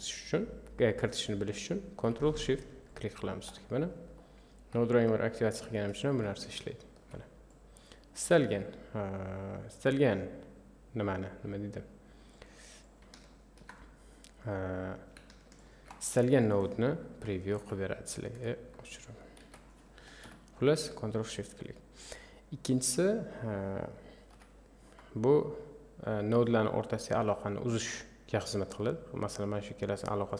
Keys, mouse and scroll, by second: 2.9 ctrl+shift+click, 4.2-6.8 middle drag, 6.8 ctrl+shift+click, 7.5-12.4 drag, 13.2 ctrl+shift+click, 15.6 ctrl+shift+click, 17.6 Delete, 19.4 ctrl+z, 19.6 click, 20.2 Delete, 23.1-24.3 drag, 24.3 Delete, 26.0 click, 27.6-30.3 drag.